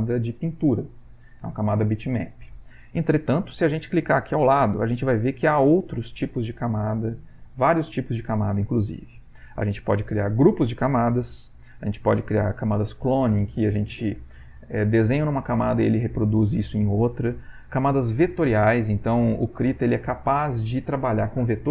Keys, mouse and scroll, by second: 4.4 click.